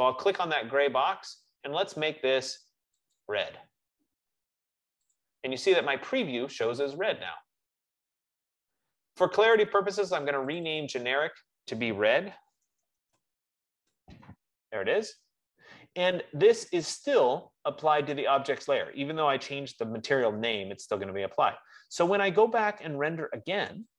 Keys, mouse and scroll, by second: 0.8 click, 2.4 F15, 3.4 click, 5.4 click, 10.8 click, 10.9 click, 12.5 ctrl+a, 12.8-14.0 typing.